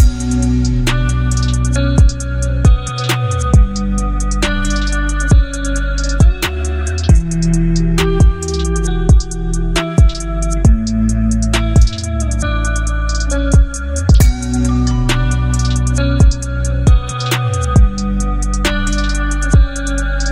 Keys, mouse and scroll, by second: 3.8 click, 6.0 ctrl+0, 8.4 right click, 9.8 click, 13.9 ctrl+d, 16.1-20.3 drag.